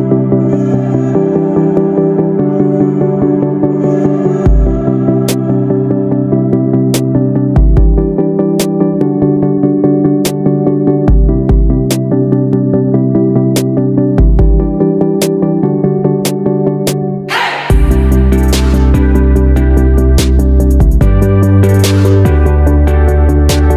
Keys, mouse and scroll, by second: 0.1 click, 2.9 ctrl+shift+g, 3.7 click, 4.6 ctrl+shift+g, 5.7 click, 6.5 ctrl+shift+g, 7.7 click, 8.5 ctrl+shift+g, 9.8 click, 10.8 ctrl+shift+g, 12.1 click, 12.9 ctrl+shift+g, 14.1 click, 15.0 ctrl+shift+g, 16.5 click, 17.4 ctrl+shift+g, 19.0 click, 20.0 ctrl+shift+g, 21.6 click.